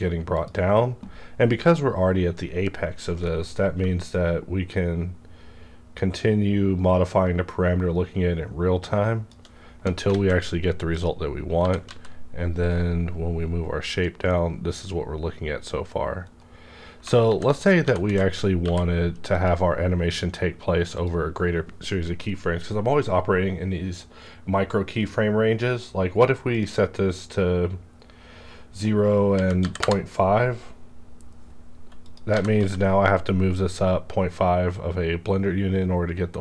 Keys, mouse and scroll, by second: 0.3 click, 3.2 shift+Num_Lock, 3.2 click, 3.3 shift+scroll down 1, 3.8-4.1 scroll down 1, 4.4-5.9 shift+drag, 5.9 shift+click, 10.1 alt+a, 11.5 g, 11.9 z, 16.2 right click, 17.2 g, 17.8 alt+g, 18.7 y, 19.3 click, 19.4 click, 21.0 click, 26.6 click, 29.3 KP_Decimal, 29.6 KP_5, 29.8 KP_Enter, 30.8-32.0 scroll down 1, 32.0 click, 32.3 g, 32.5 z.